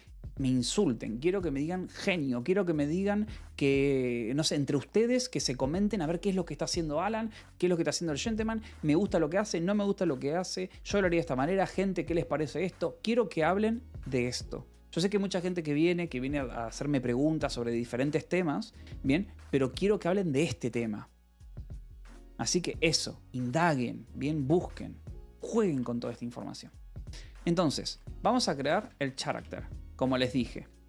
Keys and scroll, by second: 24.9 Escape, 25.0 k, 25.7 a, 27.7-29.2 typing, 29.3 Return, 30.3 Escape, 30.7 a.